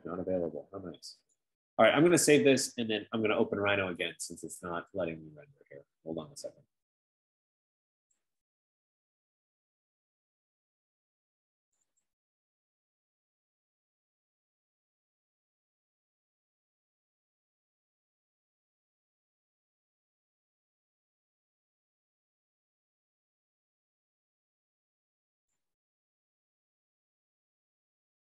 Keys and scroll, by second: 12.2 F15.